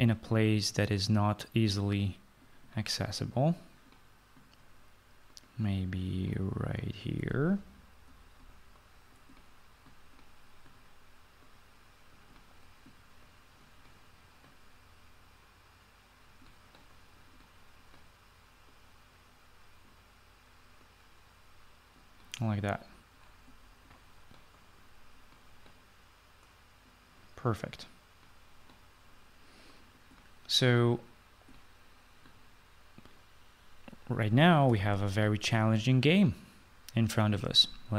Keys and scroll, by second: 7.1 f, 34.6 ctrl+s.